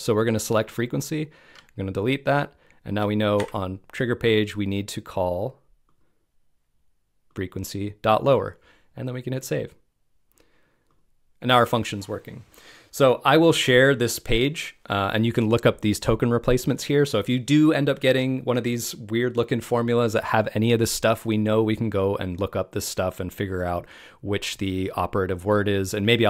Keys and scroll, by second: 1.4 BackSpace, 2.8 BackSpace.